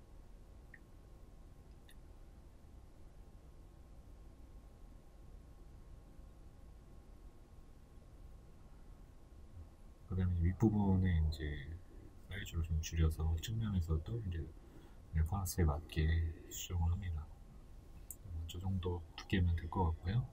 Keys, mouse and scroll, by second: 1.3 click, 1.6-3.9 middle drag, 1.6-2.0 scroll up 1, 2.3-2.8 scroll up 2, 3.2-3.9 scroll down 2, 3.9 right click, 4.7 b, 5.8 shift+middle click, 6.2 right click, 7.9 shift+middle click, 10.4 shift+middle click, 11.0 right click, 11.4 right click, 17.0 shift+middle click, 17.5-18.6 scroll down 2, 18.6-19.3 scroll down 1, 19.3 Tab, 19.3 middle click, 19.5 right click.